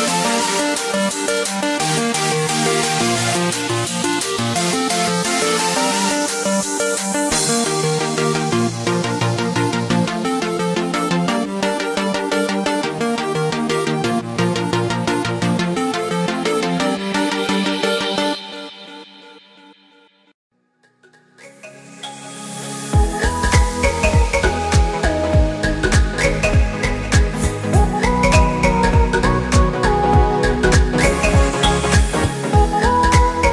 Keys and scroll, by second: 4.1 ctrl+alt+shift+e, 6.4 ctrl+g, 10.6 ctrl+space, 11.6 ctrl+space, 11.8 ctrl+0, 12.8 ctrl+t, 15.2 ctrl+z, 17.0 ctrl+t, 24.3 Return, 26.6 ctrl+t, 30.3 Return, 31.6 ctrl+0.